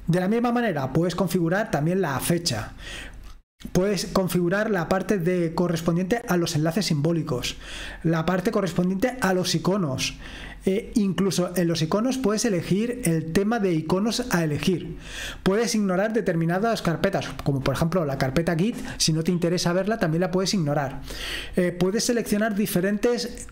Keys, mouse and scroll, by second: 1.4-2.4 scroll up 2, 3.3-4.0 scroll down 1, 4.0-6.5 scroll up 2, 8.7-11.0 scroll down 1, 12.4-13.8 drag, 14.9-17.3 scroll down 2, 18.7 click, 19.4-20.6 drag, 20.7-22.7 scroll down 2.